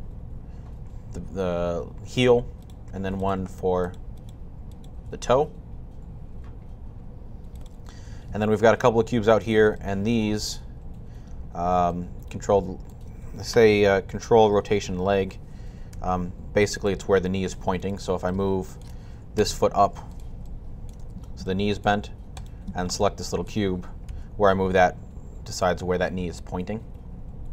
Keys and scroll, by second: 4.9 typing, 15.7 typing, 19.2 typing, 20.8 typing, 23.7-24.4 typing.